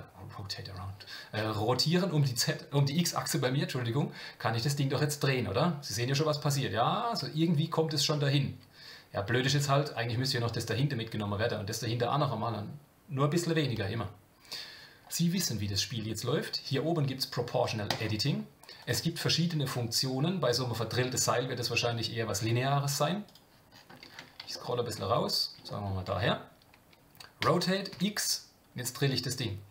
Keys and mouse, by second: 17.9 click, 18.8-23.5 drag, 24.5 shift+middle click, 25.7 shift+middle click.